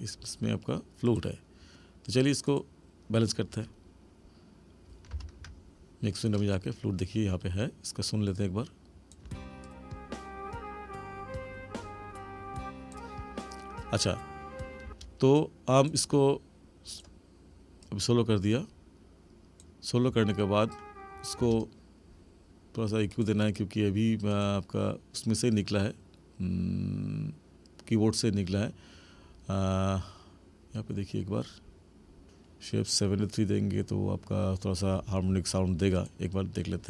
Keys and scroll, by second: 5.1 ctrl+=, 9.2 space, 14.8 space, 20.1 space, 21.4 space.